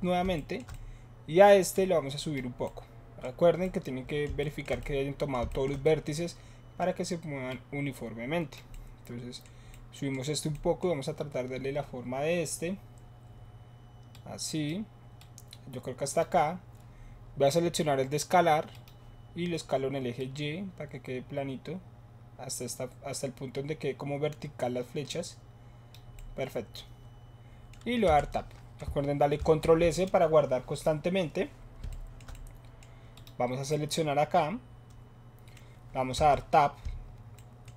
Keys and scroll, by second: 28.1 Tab, 29.3 ctrl+s, 36.2 Tab.